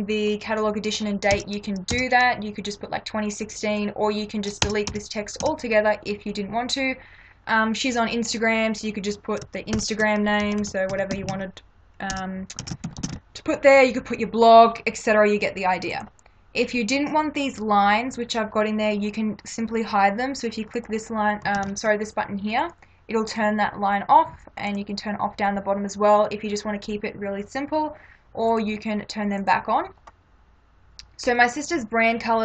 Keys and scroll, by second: 1.3 BackSpace, 4.7 BackSpace, 9.8-12.9 typing, 14.2 m, 21.6 ctrl+-.